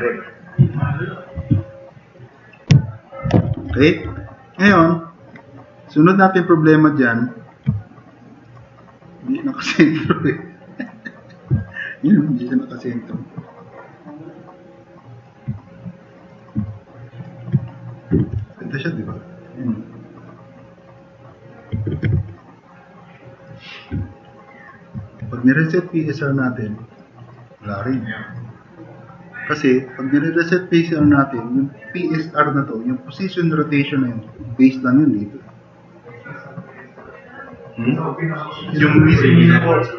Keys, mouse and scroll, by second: 1.5-1.9 drag, 2.1 click, 2.4 click, 2.8-3.2 drag, 3.7 4, 4.0 e, 5.2-5.5 scroll up 2, 5.8-6.3 drag, 6.7 click, 7.4-8.2 typing, 11.6 click, 12.3 click, 12.6-13.5 drag, 13.7-15.2 drag, 16.6-17.2 drag, 18.2 e, 21.9 ctrl+z.